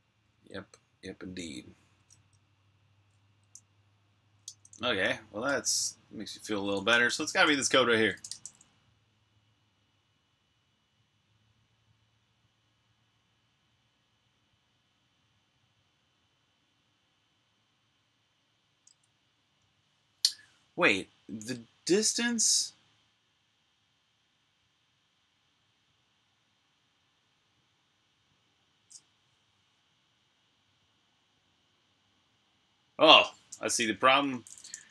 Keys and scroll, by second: 0.0-0.6 typing, 2.7 super+q, 4.6-8.1 typing, 10.3 typing, 19.2-20.7 typing, 22.1 typing, 33.8-34.9 typing.